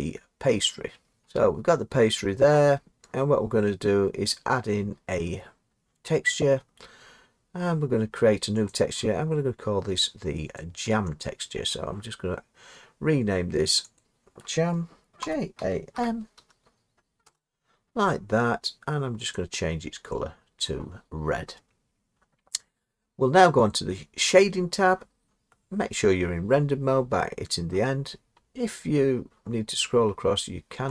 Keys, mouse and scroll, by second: 1.2 Tab, 1.3 Tab, 8.7 click, 10.6 click, 11.2 click, 13.8 click, 14.0 click, 15.2-15.9 typing, 17.2 Return, 18.2-18.7 scroll up 2, 19.4 click, 20.7 click, 28.4 middle click, 28.6 middle click, 28.8-29.7 scroll.